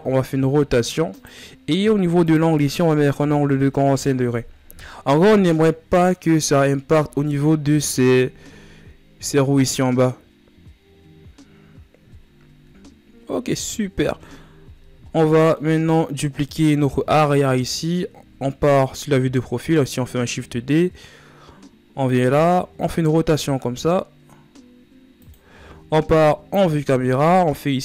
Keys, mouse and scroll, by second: 2.1-4.8 drag, 4.8-5.8 middle drag, 5.8 KP_1, 12.2 a, 14.3 shift+z, 14.6 scroll down 3, 14.8-15.5 middle drag, 15.5 ctrl+s, 17.0 KP_3, 19.4 shift+d, 22.0 r, 25.6 KP_0.